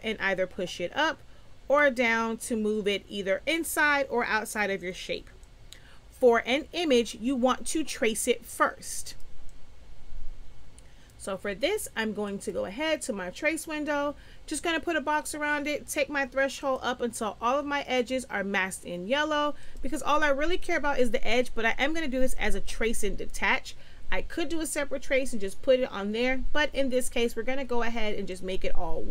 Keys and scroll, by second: 5.3 space.